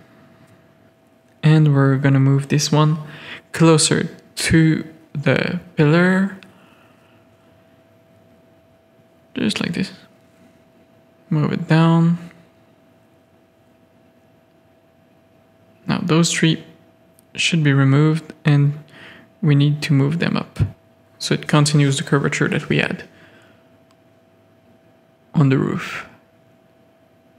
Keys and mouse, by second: 0.5 shift+click, 0.9 Tab, 1.0 click, 4.1 click, 5.1 middle click, 5.4 middle click, 6.1 Tab, 6.5 Tab, 6.6 middle click, 7.2 middle click, 8.5 middle click, 8.7 click, 9.3 click, 9.7 click, 10.4 g, 11.5 Tab, 12.2 Tab, 12.4 shift+click, 12.9 middle click, 13.1 z, 13.3 a, 13.9 z, 14.1 middle click, 17.3 z, 18.0 KP_3, 19.1 g, 21.8-23.1 drag, 23.1 g, 24.5 Tab, 25.0-26.4 drag, 26.5 Tab, 26.7 click, 27.1 shift+click.